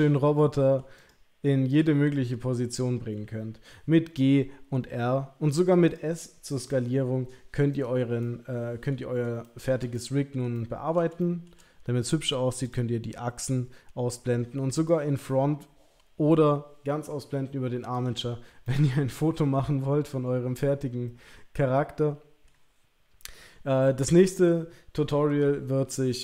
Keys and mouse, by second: 0.4-0.8 middle drag, 1.0 click, 1.9 r, 5.8 click, 6.6 s, 8.2-8.9 middle drag, 9.4 shift+middle drag, 9.9-10.3 middle drag, 10.5-10.9 ctrl+middle drag, 11.2 shift+middle drag, 12.6 click, 14.7 click, 17.9 click, 18.6-22.4 middle drag.